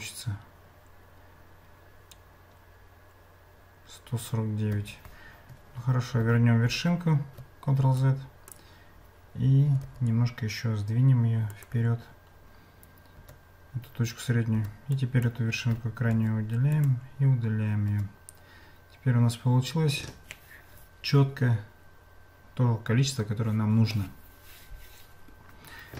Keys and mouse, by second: 4.7 Tab, 5.7 ctrl+z, 6.2 ctrl+z, 8.0 click, 9.7 g, 13.2 Tab, 14.6 Tab, 15.0 click, 16.1 x, 17.9 Tab.